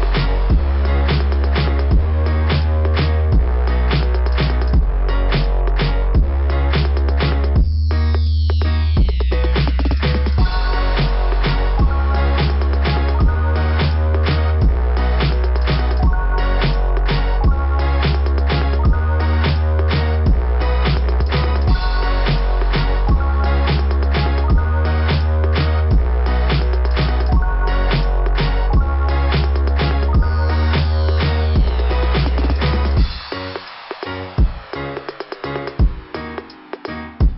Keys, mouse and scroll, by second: 1.8 scroll up 2, 4.8 scroll down 2, 17.7 click, 18.0 click, 18.2 click, 18.5 click, 18.9 click, 19.2 click, 20.9 click, 22.1 click, 25.0 click, 25.5 click, 25.8 click, 31.9 click, 32.1 click.